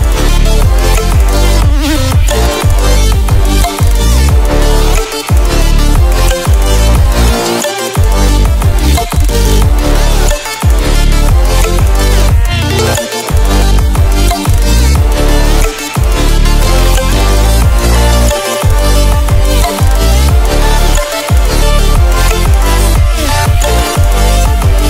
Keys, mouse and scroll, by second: 1.2 ctrl+w, 3.4 ctrl+w, 5.4-10.9 drag, 20.8 Escape, 21.9 click.